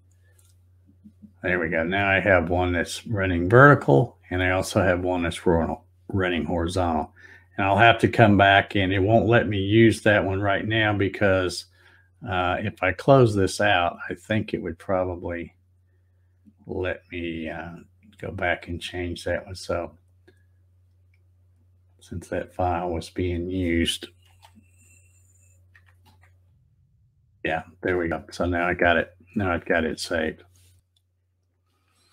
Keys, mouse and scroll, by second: 0.0 click, 1.7 click, 2.7-3.0 scroll down 2, 3.0-3.7 scroll up 2, 10.3 click, 12.7 click, 13.9 click, 15.2 click, 17.8-18.1 scroll down 1, 19.9 right click, 21.9 click, 23.1 click, 24.3 space.